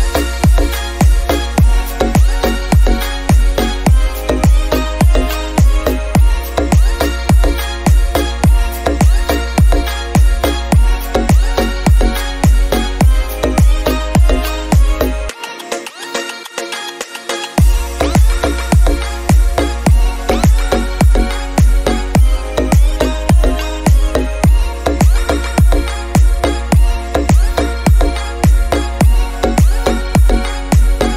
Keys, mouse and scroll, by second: 0.4 KP_0, 2.5 drag, 5.9 middle click, 6.4 r, 9.4 click, 10.0 click, 10.7-12.5 middle drag, 12.5 drag, 15.0-15.7 middle drag, 15.7 r, 18.9 r, 20.7-23.5 middle drag, 23.5 drag, 25.5 click, 25.7-27.7 middle drag, 26.4-27.5 scroll down 3, 27.7 click, 29.5 click, 31.0 click.